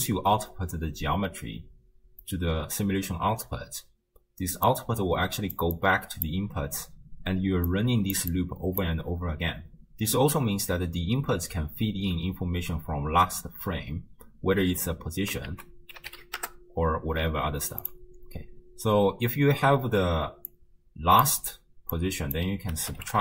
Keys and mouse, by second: 3.8-6.3 typing, 4.8 click, 5.8 click, 7.3-9.8 typing, 7.7 click, 8.3 click, 15.5 ctrl+a, 20.6-21.3 drag, 22.0-23.2 drag.